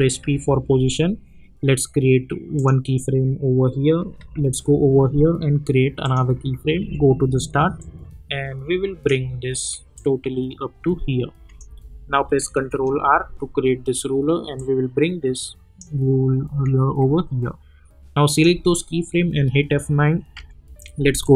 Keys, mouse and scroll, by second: 0.2 p, 2.5 click, 4.2 k, 6.0 click, 6.8 j, 7.8-12.7 drag, 12.7 ctrl+r, 14.5-18.0 drag, 18.2 click, 18.8 -, 19.3 F9, 20.3 =, 21.2-21.3 drag.